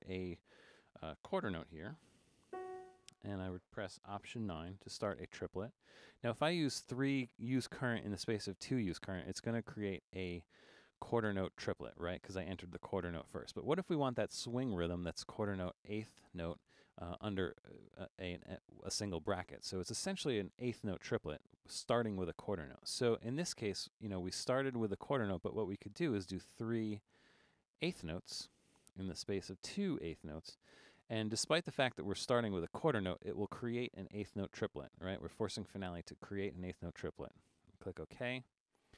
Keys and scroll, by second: 2.5 f, 4.7 alt+9.